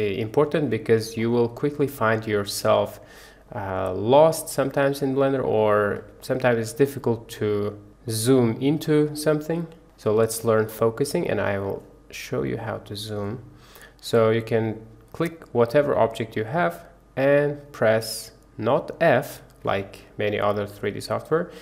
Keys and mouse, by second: 2.3-4.5 middle drag, 6.2-6.8 middle drag, 7.8 middle click, 9.0-9.8 middle drag, 9.7 click, 10.6-10.9 drag, 10.6-10.9 middle drag, 11.6 click, 11.6 middle click, 12.5 click, 15.2 click.